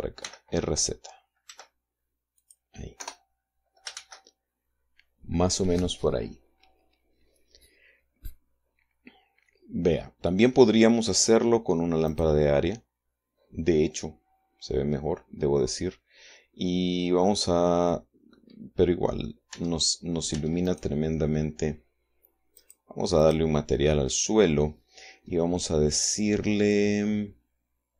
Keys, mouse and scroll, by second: 0.4-1.8 middle drag, 0.8 r, 2.0 z, 2.9 click, 3.5 KP_0, 4.5 shift+z, 12.6 click, 18.9-20.0 middle drag, 20.1 Tab, 20.9 Tab, 21.2 right click, 23.1 click, 23.8 click.